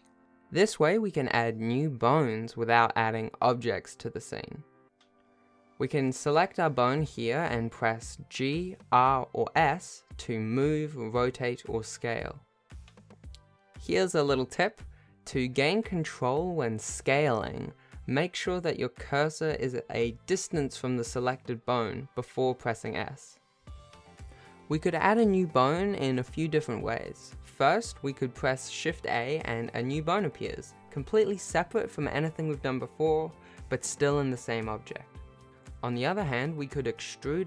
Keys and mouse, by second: 1.2 Tab, 2.2 Tab, 3.1 Tab, 5.1 g, 7.2 r, 7.2 s, 13.6 shift+middle click, 14.0 shift+s, 17.1 s, 23.7 s, 24.3 shift+middle click, 25.8 g, 28.0 shift+a, 31.1-36.8 shift+middle drag, 37.2 e.